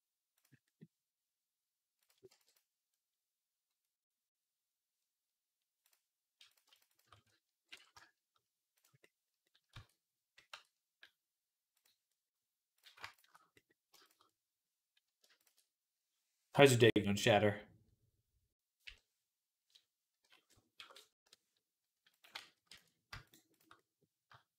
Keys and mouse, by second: 0.6-1.9 drag, 2.1 b, 2.8-5.1 middle drag, 5.7 click, 6.7 alt+shift+click, 7.5 ctrl+b, 8.8-13.8 middle drag, 9.6 Tab, 10.3 Tab, 11.6-12.6 drag, 13.8 shift+click, 13.9 shift+middle click, 14.2 middle click, 14.3 middle click, 15.2 ctrl+shift+click, 15.4-23.4 middle drag, 18.7 /, 20.0 ., 21.0 i, 22.2 ctrl+z, 22.5 ctrl+z, 23.4 shift+click, 23.5-24.5 middle drag.